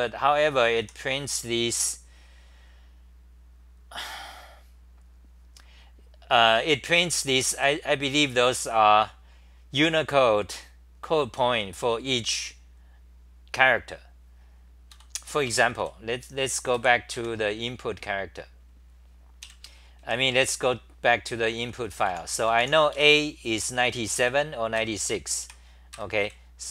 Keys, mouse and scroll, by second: 0.0-1.3 typing, 7.5 d, 14.9 ctrl+g, 15.8 w, 16.7 3, 17.1 4, 19.4 ctrl+shift+Tab, 20.0 ctrl+Tab, 21.2-26.2 typing, 23.0 Home, 24.7 ctrl+g, 25.9 ctrl+g.